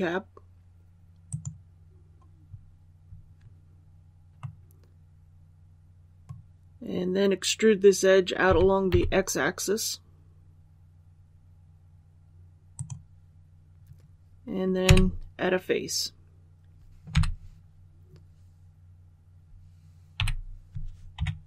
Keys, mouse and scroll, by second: 1.2 click, 4.3-7.0 middle drag, 8.4-8.8 typing, 12.7 click, 14.8 f, 17.0 3, 20.1 i, 21.1 KP_3.